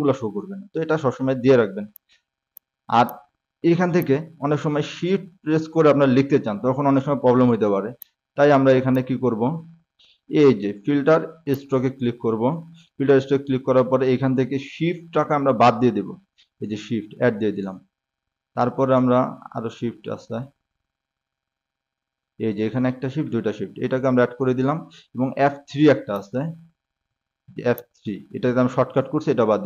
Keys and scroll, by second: 14.0 ctrl+shift+s.